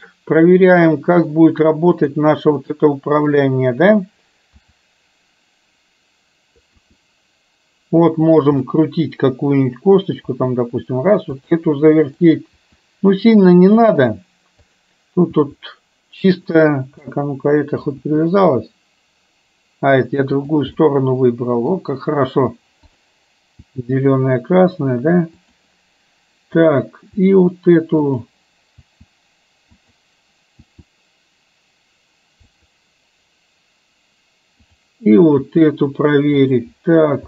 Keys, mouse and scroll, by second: 2.1 click, 2.6-3.3 middle drag, 4.6 e, 8.8-10.0 middle drag, 10.4 r, 12.1 click, 12.6 r, 14.8 click, 17.1 middle click, 20.9-21.8 middle drag, 22.9-23.3 drag, 23.8 r, 28.9 r, 29.6 r, 34.8 click, 35.5 r.